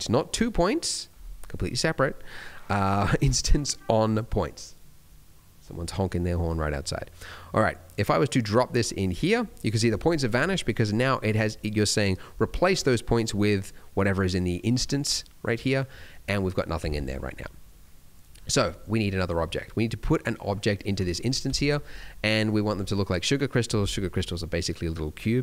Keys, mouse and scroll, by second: 10.7 middle click, 11.1-11.5 scroll up 2, 11.5 middle click, 13.5 click, 17.3-20.4 scroll down 1, 20.6 click, 22.3 middle click.